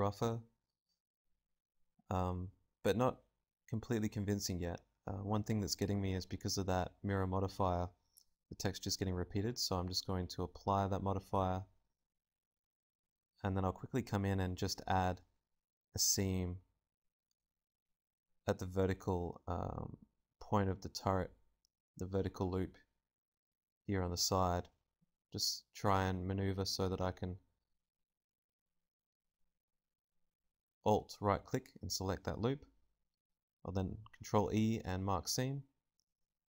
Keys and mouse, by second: 2.5 KP_Decimal, 7.1-9.3 drag, 9.3 right click, 9.7 Tab, 9.7-11.1 drag, 10.2 a, 11.1 ctrl+Tab, 13.3 click, 14.2 right click, 14.2 l, 15.1 middle click, 16.6-17.8 right drag, 17.2 l, 17.2 g, 17.8-20.1 drag, 18.5 a, 20.5 ctrl+Tab, 21.5 ctrl+r, 21.5-22.7 middle drag, 23.2-25.3 middle drag, 23.7 z, 25.6 ctrl+r, 27.5-32.5 right drag, 30.9-32.5 drag, 31.3 z, 32.5 ctrl+e, 35.6 z, 36.3 z.